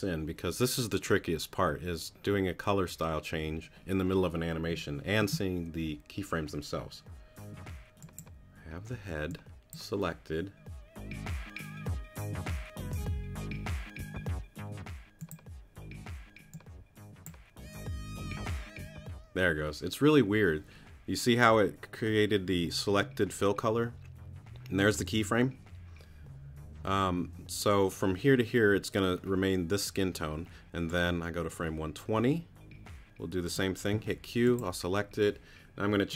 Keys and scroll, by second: 8.9 q, 33.9 q.